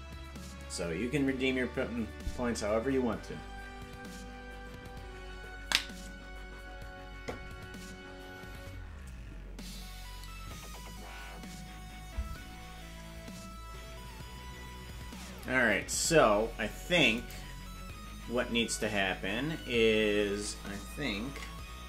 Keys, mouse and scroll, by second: 17.1 click.